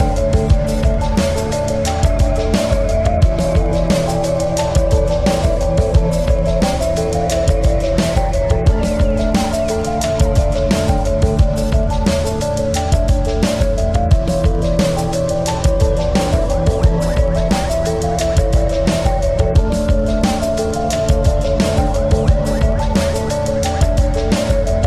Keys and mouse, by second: 0.0-2.3 typing, 0.7 ctrl+-, 2.3-5.5 drag, 5.6 click, 5.6 typing, 7.0-8.4 drag, 7.0 typing, 8.8 click, 8.8 typing, 11.8-13.4 drag, 11.8 typing, 13.9-15.3 drag, 14.7-15.2 typing, 17.3-21.7 drag, 17.3 typing, 20.2 typing, 23.4-24.8 alt+drag.